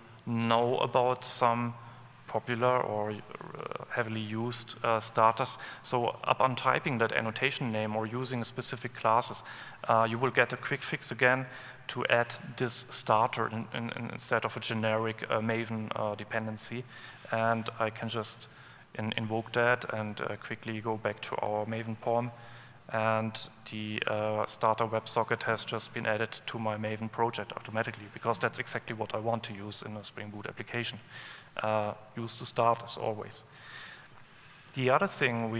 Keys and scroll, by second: 3.8 alt+Return.